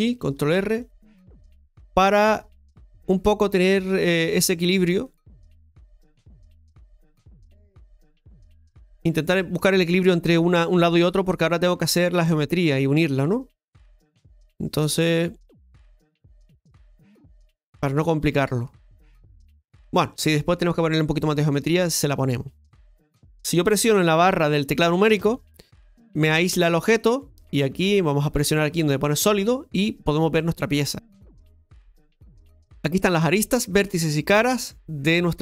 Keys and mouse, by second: 1.0 click, 4.5 ctrl+r, 7.4 ctrl+middle click, 9.0 shift+middle click, 21.1 shift+middle click, 25.1 KP_Divide, 29.2 click.